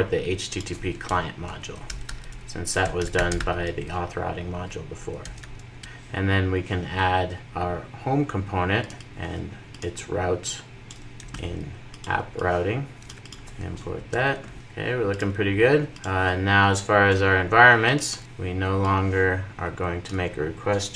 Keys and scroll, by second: 5.8 super+s, 13.0 super+v, 13.7 alt+Return, 14.5 super+s.